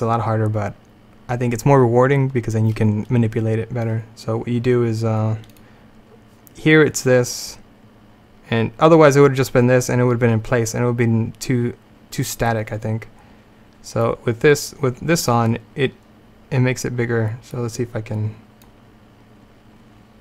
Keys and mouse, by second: 5.6-9.1 drag, 14.0-17.2 drag, 18.7-20.2 drag.